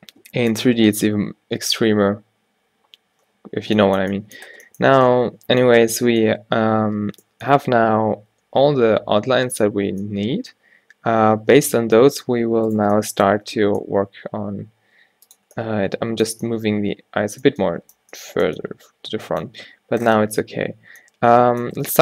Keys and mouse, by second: 12.0 middle click, 12.8-14.5 right drag, 13.5 g, 16.4 a.